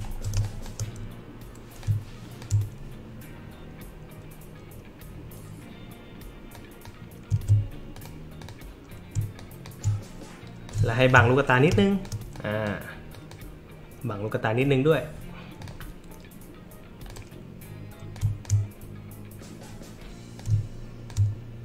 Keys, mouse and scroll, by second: 0.3 space, 0.4 click, 1.8 click, 6.5 click, 7.3 ctrl+z, 7.9 click, 8.4 click, 9.3 shift+click, 10.7 shift+click, 11.7 space, 11.7 click, 12.3 click, 13.1 click, 15.6 click, 17.1 click, 18.1 click, 20.4 shift+click.